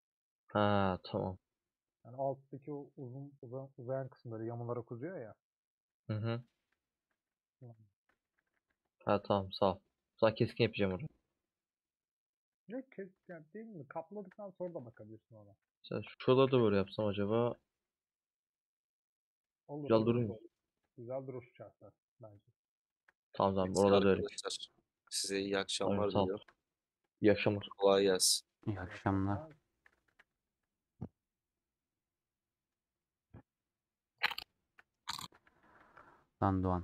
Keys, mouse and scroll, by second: 0.3-6.0 middle drag, 6.0 3, 7.7 ;, 8.1 middle click, 8.5 a, 9.2-11.6 middle drag, 11.6 scroll up 2, 12.6 click, 12.7-14.2 middle drag, 14.2 shift+click, 14.7 3, 14.8-16.1 alt+drag, 16.1 ;, 16.8 a, 18.5-20.1 middle drag, 20.1 3, 21.1-23.0 middle drag, 23.0 shift+click, 23.1-25.1 middle drag, 25.1 shift+click, 25.3-27.2 middle drag, 27.2 shift+click, 28.0 alt+z, 28.3 middle click, 28.7 alt+z, 29.5 ;, 29.7 middle click, 30.1 a, 30.7-32.8 middle drag, 32.8-33.3 scroll down 2, 33.4 scroll down 6, 33.5-34.7 middle drag, 34.7 /, 35.3 Tab.